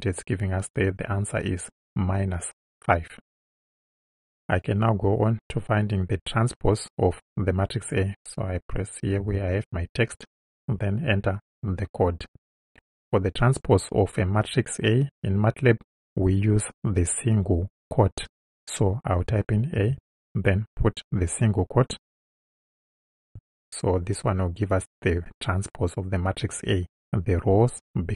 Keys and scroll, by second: 9.2 Return, 19.8 shift+a, 22.1 '.